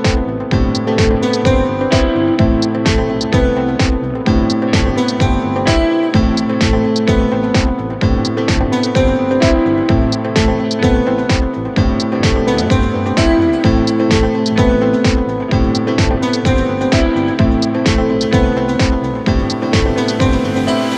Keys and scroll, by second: 3.5 shift+F2, 3.7 F3, 4.3 Escape, 11.4 space.